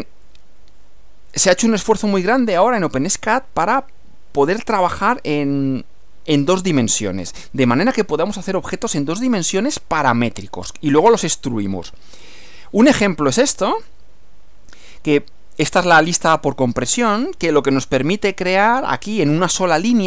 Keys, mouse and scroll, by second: 0.2-2.2 drag, 9.0-11.0 drag, 13.6 F6.